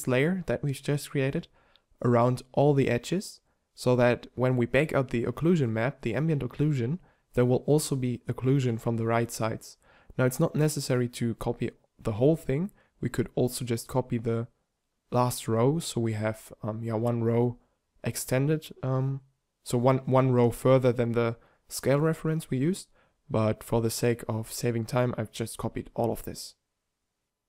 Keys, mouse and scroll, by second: 0.5 shift+Tab, 1.5 shift+d, 4.6 shift+d, 6.7-7.7 drag, 8.0 shift+d, 8.4 click, 9.7 shift+d, 11.3 click, 11.8-13.4 drag, 11.9 shift+d, 13.7-14.2 drag, 14.9 shift+d, 15.9-17.5 drag, 17.7 shift+d, 19.3 click, 20.2 shift+d, 22.8 z, 23.7 shift+c, 26.0 b.